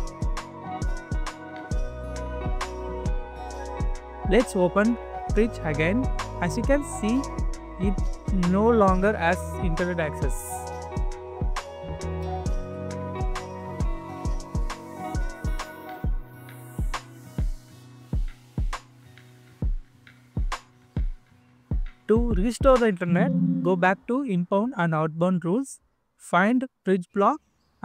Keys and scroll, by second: 9.9-12.5 scroll down 1.